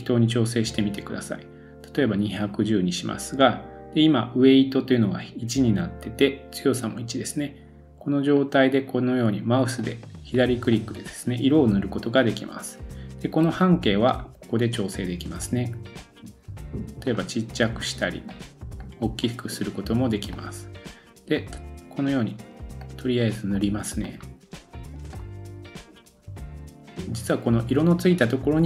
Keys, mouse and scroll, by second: 27.5-28.6 drag.